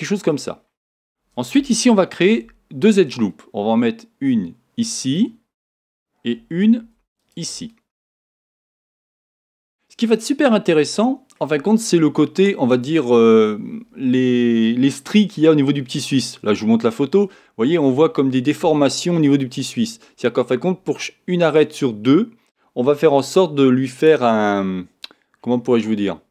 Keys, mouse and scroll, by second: 0.6-2.3 scroll up 2, 2.3 ctrl+r, 5.1 click, 6.8 ctrl+r, 9.5 click, 10.0-26.3 middle drag.